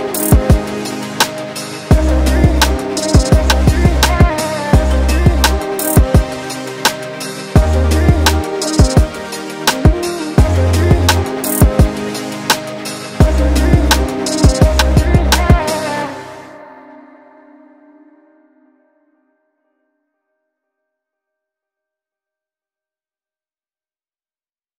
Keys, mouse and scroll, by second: 0.9 click, 1.4 click, 2.2 click, 2.7 middle click, 5.7 r, 6.9 KP_7, 7.7 r, 13.7 ctrl+z, 14.4 middle click, 15.1 scroll down 1, 15.5 Tab, 15.8 middle click, 16.3-16.6 scroll up 2, 17.0 click, 17.6 g, 18.3 right click, 18.8 click, 19.3 shift+Tab, 20.5 middle click, 23.9 scroll down 2, 24.0 middle click.